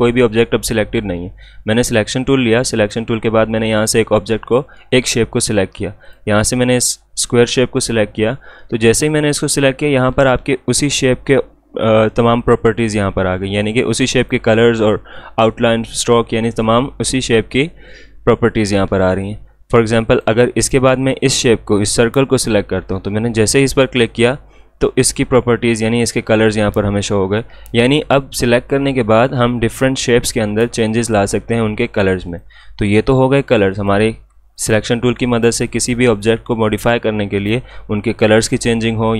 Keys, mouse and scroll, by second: 1.8 click, 6.0 click, 13.8 click, 20.1 click, 20.3 click, 25.6 click, 32.3 click.